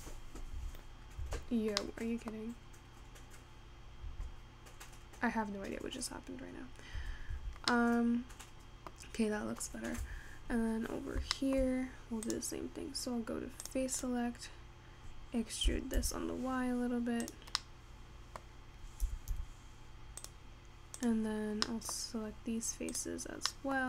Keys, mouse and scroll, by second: 0.3 Tab, 1.8 Tab, 2.0 middle click, 2.5-3.1 scroll down 2, 4.1 Tab, 6.4 scroll up 2, 7.1 Tab, 8.5-9.7 middle drag, 9.7-11.3 scroll down 2, 11.3 Tab, 11.9-12.5 scroll up 3, 12.5 click, 14.0 click, 14.6 scroll down 2, 16.2 e, 18.1 middle click, 19.1 e, 21.4 click, 21.8-23.1 middle drag, 23.1 click.